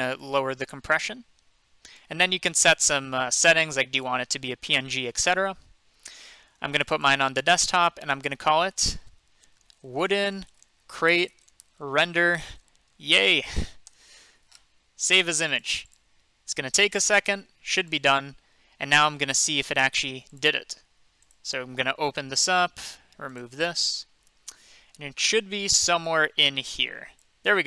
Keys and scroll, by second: 9.3-11.1 typing, 12.2-14.4 typing.